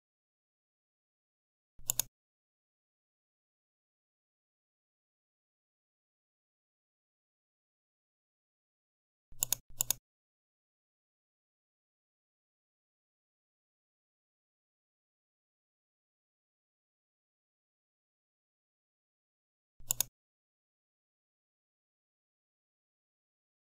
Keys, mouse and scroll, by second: 1.7 click, 3.6 typing, 3.9 Return, 9.3 click, 11.2 Left, 11.6 Right, 12.2 BackSpace, 12.5 3, 12.8 Return.